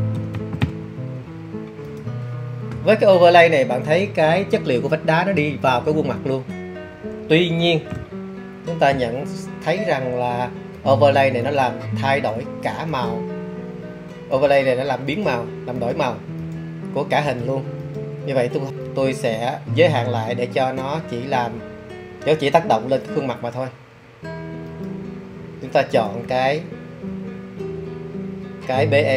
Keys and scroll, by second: 0.0-1.1 typing.